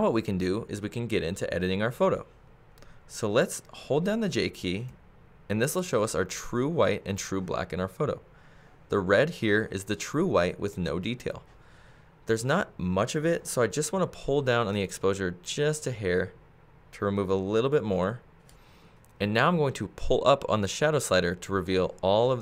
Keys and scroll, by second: 4.9 j.